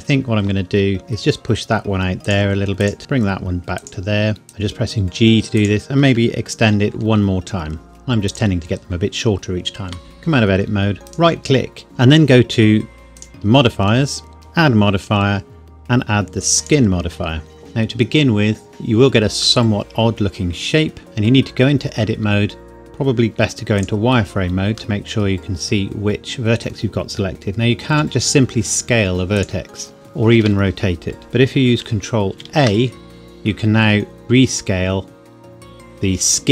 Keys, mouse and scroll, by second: 1.0 g, 2.3 click, 3.0 g, 3.8 click, 4.5 g, 5.6 click, 7.0 e, 8.3 click, 9.9 Tab, 11.1 right click, 13.2 click, 16.7 click, 19.6 middle click, 19.7 middle click, 21.2 Tab, 23.3 z, 23.8 click, 25.0 middle click, 27.9 s, 29.4 click, 29.9 r, 30.4 Escape, 32.3 ctrl+a.